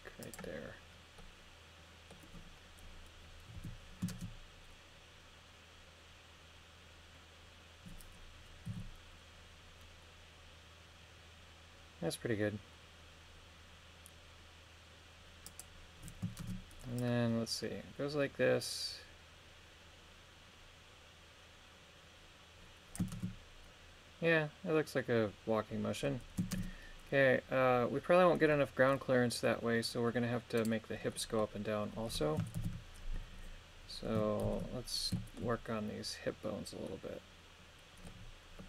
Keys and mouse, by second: 0.2 click, 1.2-2.2 middle drag, 3.5 KP_3, 4.1 shift+space, 8.7 g, 15.5 click, 16.4 shift+space, 17.0 click, 23.1 shift+space, 26.5 shift+space, 28.4-29.5 middle drag, 30.6 right click, 31.1 middle click, 32.6 shift+Left, 34.4 ctrl+KP_1, 35.2 shift+middle click, 36.9-38.1 middle drag.